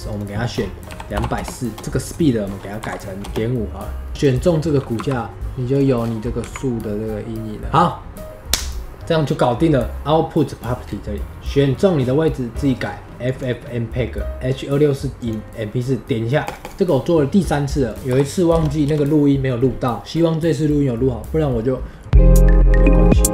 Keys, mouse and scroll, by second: 3.2-5.2 drag, 5.3 space, 6.0 scroll down 2, 7.7 click, 16.6 click, 16.7 ctrl+s.